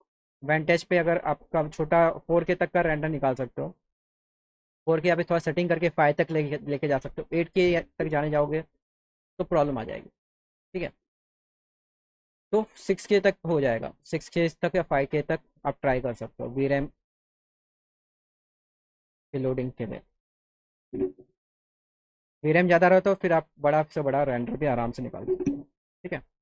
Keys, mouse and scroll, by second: 11.9-14.6 drag, 15.5-16.3 drag.